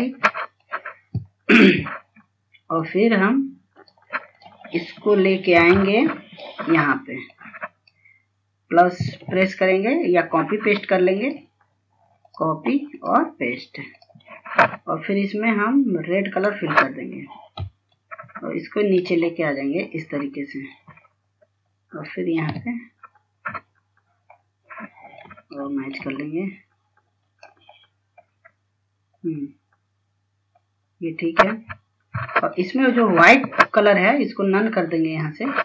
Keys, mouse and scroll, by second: 0.3 click, 6.8 F2, 7.2-14.3 drag, 17.6 right click, 19.3 ctrl+click, 20.7-21.2 scroll down 1, 21.2 scroll up 1, 22.1 click, 24.0 scroll up 1, 24.7-25.1 scroll down 1, 25.7 scroll up 1, 26.6-29.2 drag, 29.2-29.6 scroll down 2, 30.2-32.5 scroll up 1, 32.5-32.9 scroll down 1, 34.1 click.